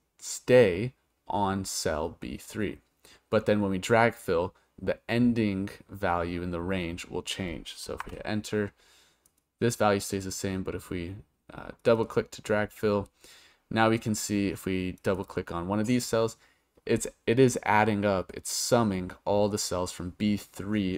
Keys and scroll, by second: 8.0 Return.